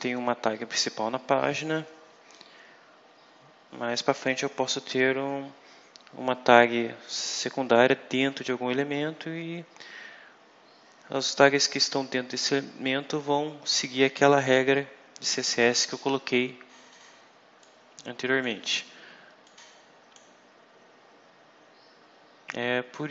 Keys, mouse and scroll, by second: 17.5 click, 19.3 click.